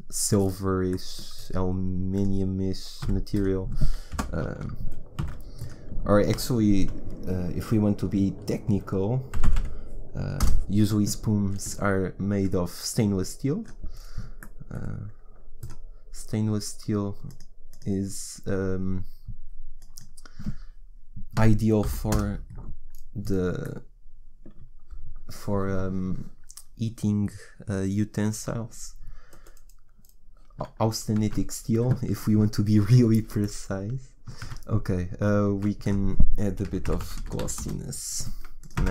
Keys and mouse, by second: 3.0 a, 4.1 Delete, 5.2 shift+a, 12.4-26.1 drag, 31.2 shift+z, 34.4 shift+z, 35.5 shift+a, 37.3 s.